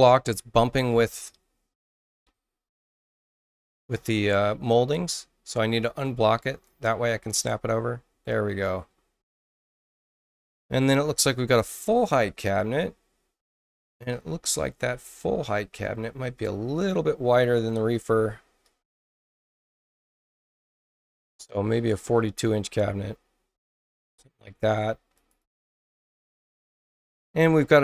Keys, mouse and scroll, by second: 0.8 click, 3.3-6.6 drag, 8.9 space, 11.9-12.5 scroll up 4, 12.8 scroll down 2, 14.0-14.8 scroll up 4, 14.9-15.8 scroll down 6, 16.2 middle click, 19.8 click, 20.5 click, 21.9-23.9 drag, 25.1 click, 25.3 click.